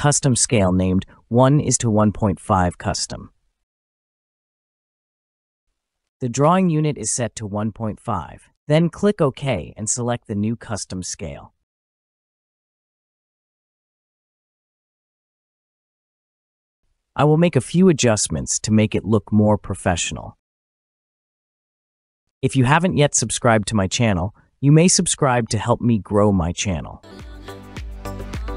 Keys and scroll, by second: 2.6 typing, 5.3 typing, 6.9 typing, 25.2 Escape.